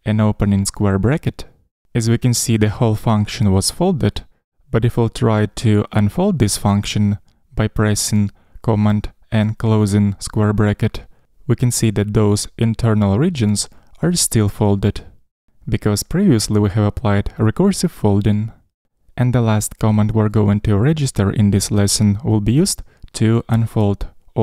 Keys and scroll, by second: 1.8 ctrl+alt+super+[, 9.2 super+].